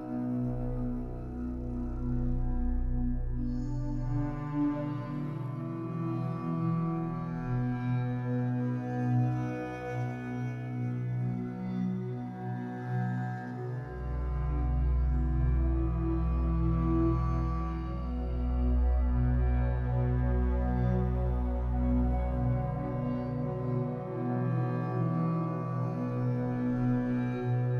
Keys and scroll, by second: 1.7 Escape, 3.7 m, 7.0 Escape, 11.5 Escape, 11.8 3, 16.8 w, 21.6 Escape, 27.1 b.